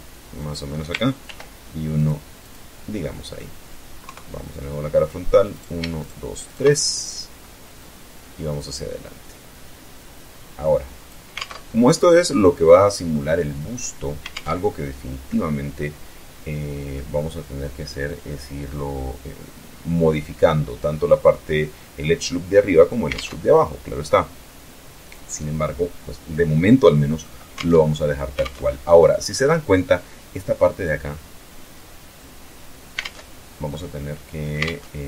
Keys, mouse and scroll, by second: 0.6 ctrl+r, 1.3 click, 1.7 click, 2.3-2.9 middle drag, 3.4 KP_3, 4.9 right click, 5.3 shift+right click, 5.8 shift+right click, 6.0-6.9 shift+middle drag, 7.1-10.6 drag, 10.7 alt+Tab, 13.6 alt+Tab, 14.6-16.5 drag, 16.6 scroll up 1, 22.4 alt+Tab, 26.9 alt+Tab, 27.7 alt+Tab, 32.3 alt+Tab, 33.1 click, 34.0 alt+Tab.